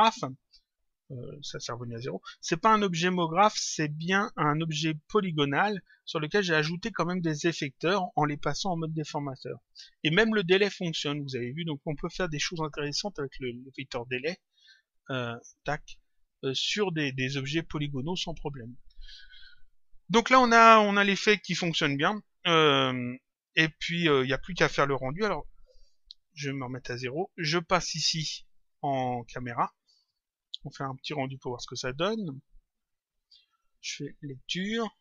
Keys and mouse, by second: 2.4 click, 15.5 click, 26.4 click, 29.5 click, 31.1 click, 33.4 click.